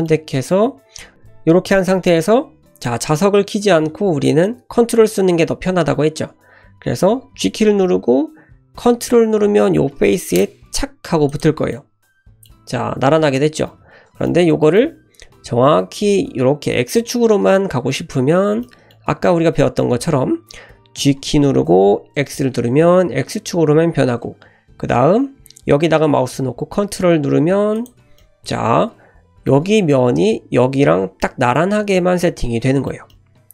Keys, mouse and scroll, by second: 1.1 ctrl+z, 7.4 g, 11.7-13.5 middle drag, 13.7 ctrl+z, 14.2-16.3 middle drag, 14.3 typing, 18.6-21.0 middle drag, 21.0 g, 28.2-29.7 middle drag, 31.2-33.5 middle drag.